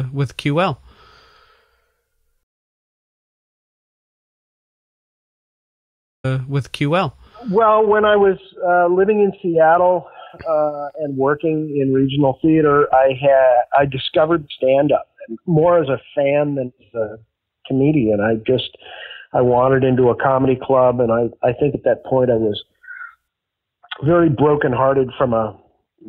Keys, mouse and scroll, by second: 0.5 click, 1.4 click, 3.2 Delete, 3.5 click, 4.5-5.5 drag, 6.0 click, 6.1 space, 7.8 click, 8.2 click, 9.1 click, 9.6-11.3 drag, 11.6 click, 13.0 click, 13.5-14.6 drag, 14.9 click, 15.5 ctrl+s, 16.3-19.4 drag, 19.8 click, 20.8 click, 21.8-23.0 drag, 23.2 click, 24.5-26.0 drag.